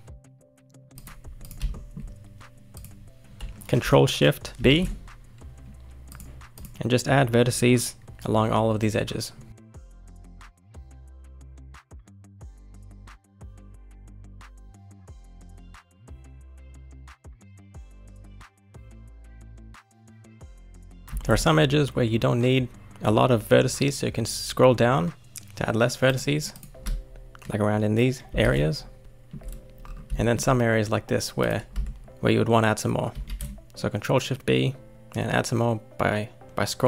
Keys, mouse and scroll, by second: 1.4 click, 1.7-2.7 shift+middle drag, 2.7 click, 3.2-4.6 scroll up 1, 4.6 ctrl+shift+b, 6.5 click, 9.9 ctrl+shift+b, 10.8 click, 10.9 shift+middle click, 11.7 ctrl+shift+r, 12.5 ctrl+shift+b, 13.0 click, 13.1 shift+middle click, 13.5 ctrl+shift+r, 14.1 ctrl+shift+b, 14.7 click, 15.1 ctrl+shift+b, 15.6 click, 15.7 shift+middle click, 16.2 ctrl+shift+b, 16.6 click, 16.7 shift+middle click, 17.2 ctrl+shift+b, 17.6 shift+middle click, 17.8 click, 18.2 ctrl+shift+b, 19.4 shift+middle click, 20.0 click, 20.3-21.1 scroll up 1, 21.1 ctrl+shift+b, 26.5 click, 28.3 ctrl+shift+b, 29.0 shift+middle click, 29.5-30.2 scroll down 5, 30.2 shift+middle click, 30.4-31.4 scroll up 2, 31.4 click, 32.1 click, 33.1 ctrl+shift+b.